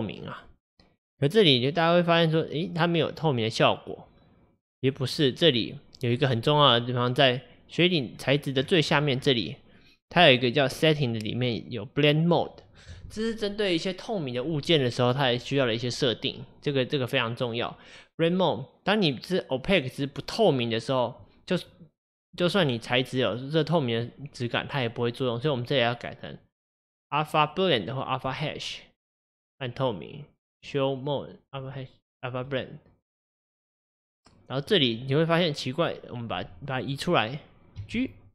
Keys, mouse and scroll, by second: 21.6-28.4 middle drag, 31.7-32.6 drag, 36.9 click, 37.8 g.